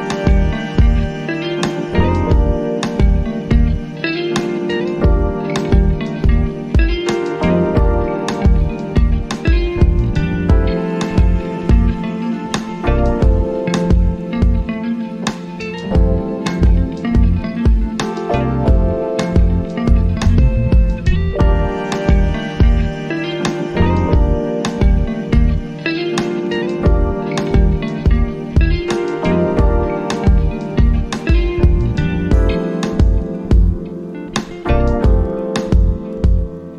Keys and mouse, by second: 19.4 click, 22.0 shift+Num_Lock, 22.0-36.7 shift+drag.